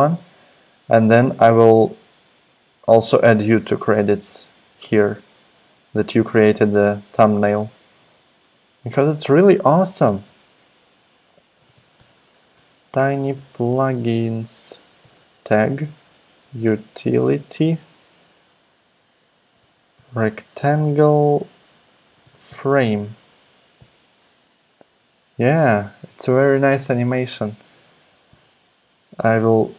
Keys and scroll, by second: 10.0 t, 11.3-18.0 typing, 19.3-23.8 typing.